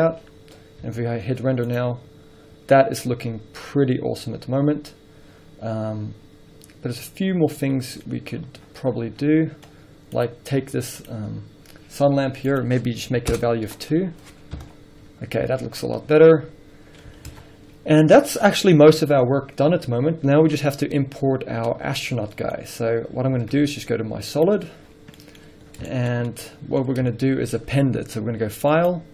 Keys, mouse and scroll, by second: 0.4-0.7 scroll down 1, 0.7-1.2 scroll up 1, 2.2 z, 2.6 scroll up 1, 4.4-5.0 scroll down 1, 8.0-9.1 middle drag, 8.4-9.1 scroll down 2, 9.6 middle drag, 9.8 scroll up 2, 10.7 click, 11.5 scroll up 2, 13.6-22.7 drag, 13.7 Return, 14.8 KP_0, 15.4 scroll up 1, 17.6 alt+a, 22.7-24.6 middle drag, 22.9-23.3 scroll down 2, 23.6 z, 25.0-25.7 scroll down 3, 25.3 middle click, 26.2-29.1 middle drag, 27.0 scroll up 2.